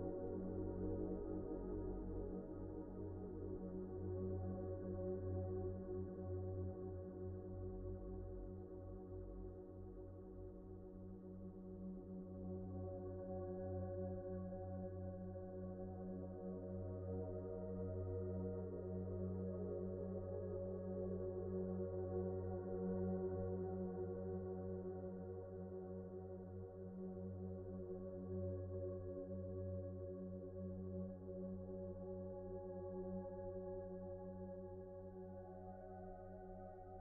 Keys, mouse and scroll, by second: 0.3-0.6 scroll up 1, 1.4 scroll up 1, 3.7 alt+shift+click, 4.2 scroll down 1, 4.4 alt+z, 4.6 middle click, 6.8 right click, 11.4-11.7 scroll up 1, 11.8 shift+middle click, 13.8-14.2 scroll up 1, 14.2 middle click, 15.2-15.5 scroll up 1, 16.0-16.6 scroll down 1, 16.6 middle click, 17.0 scroll down 1, 17.1-18.0 scroll up 1, 18.0 middle click, 18.4-18.8 scroll down 1, 18.8 middle click, 23.1-23.8 scroll up 1, 23.8 shift+middle click, 25.4 scroll up 1, 25.6 shift+middle click, 26.1 scroll up 1, 26.4 shift+middle click, 28.8-29.3 scroll up 1, 30.4 s, 33.8 Return, 34.7 typing, 36.5 Return.